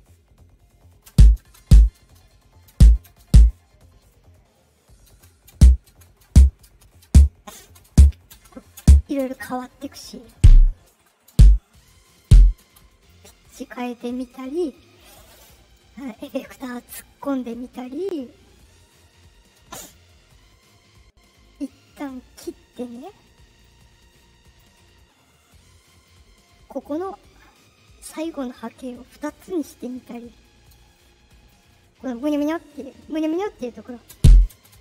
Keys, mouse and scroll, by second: 1.0-3.2 typing, 2.2 click, 3.4 click, 4.5 click, 5.0-9.1 typing, 7.3 click, 9.7-12.2 drag, 10.3-12.5 typing, 13.0 click, 20.2 shift+click, 22.6 click, 23.6 click, 25.2 click, 26.8 click, 28.6 click, 30.9 click, 34.0-34.8 typing.